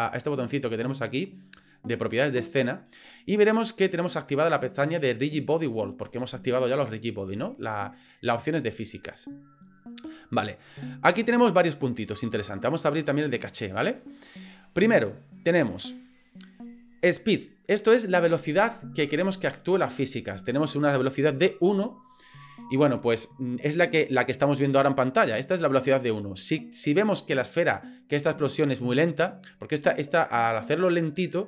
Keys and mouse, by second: 8.4 click, 13.2 click, 25.7 click, 29.2 click.